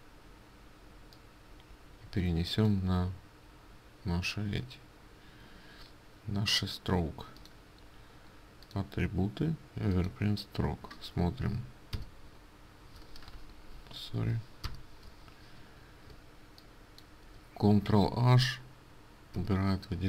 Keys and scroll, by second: 12.0 ctrl+alt+shift+i, 13.6 Escape, 16.2 ctrl+space, 17.8 ctrl+space, 19.5 ctrl+h.